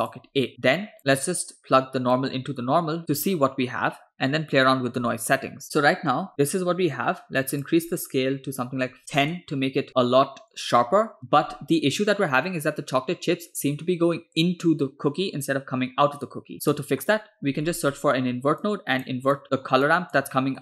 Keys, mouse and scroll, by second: 0.7 click, 2.2-3.0 drag, 6.7-7.5 scroll up 2, 7.5 scroll up 1, 7.6-9.4 drag, 9.9-10.9 scroll down 3, 16.5 scroll down 2, 16.7 middle click, 17.7 scroll down 2, 18.0 middle click, 18.7-19.1 drag, 19.4 click, 19.9 click, 20.4 middle click.